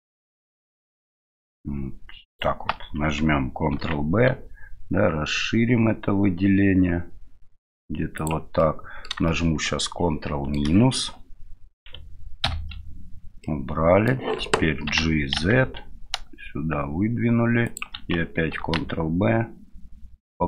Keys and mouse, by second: 0.5 shift+middle click, 2.3 shift+right click, 3.7 ctrl+b, 8.6 click, 9.3-10.5 shift+drag, 12.4 ctrl+KP_Subtract, 13.4 middle click, 14.9 g, 18.6 ctrl+b.